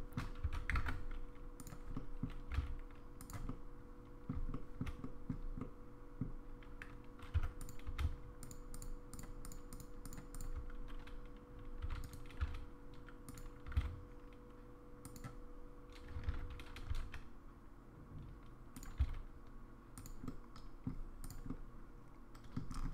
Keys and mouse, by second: 0.7 alt+1, 0.8 alt+z, 1.6 click, 2.0 middle click, 2.5 g, 3.5 middle click, 4.5 shift+middle click, 5.0 middle click, 5.6 middle click, 7.4 3, 7.6 click, 8.5 shift+click, 9.4 shift+click, 9.7 shift+click, 10.0 shift+click, 10.3 shift+click, 11.8 e, 13.2 s, 13.9 g, 16.3 ctrl+z, 17.1 e, 19.0 s, 20.3 middle click, 21.5-22.6 middle drag.